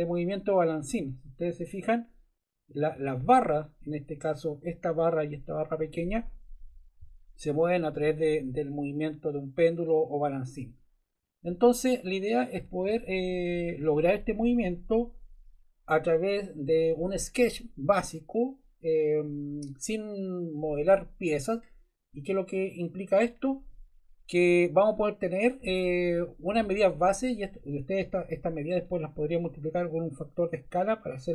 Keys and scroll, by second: 0.9 Left, 7.0 Left, 8.0 Right, 11.5 Left.